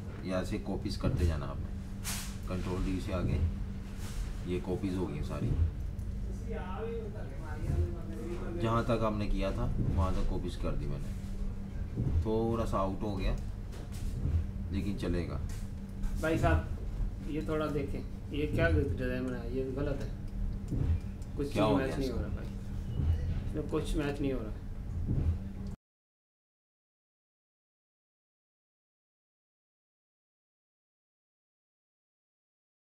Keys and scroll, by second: 0.7 super+d, 0.9 super+d, 1.3 super+d, 1.5 super+d, 2.4 super+-, 2.6 super+-, 2.7 super+-, 3.0 super+d, 3.4 super+d, 3.7 super+d, 4.1 super+d, 4.3 super+d, 4.7 super+-, 5.0 super+d, 5.2 super+d, 5.4 super+d, 5.6 super+d, 5.8 super+-, 6.5 super+d, 6.6 super+d, 6.7 super+d, 6.8 super+d, 7.5 super+-, 7.6 super+-, 7.9 super+d, 8.4 super+d, 8.5 super+d, 8.6 super+d, 8.6 super+d, 10.4 super+d, 10.6 super+d, 12.7 typing, 15.5 super+-, 15.7 super+-, 15.9 super+d, 16.1 super+d, 16.5 super+d, 16.8 super+d, 17.3 super+d, 18.8 super+-, 19.1 super+-, 19.2 super+-, 19.7-21.1 typing, 22.4 typing, 25.6 Page_Down.